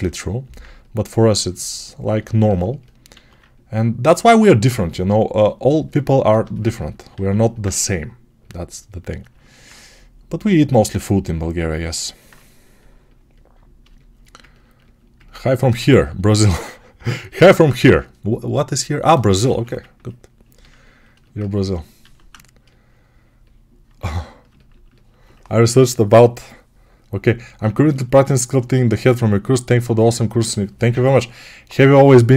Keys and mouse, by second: 3.0 alt+q, 7.0 alt+q, 12.1-32.3 right drag, 19.3 1, 21.8 alt+q.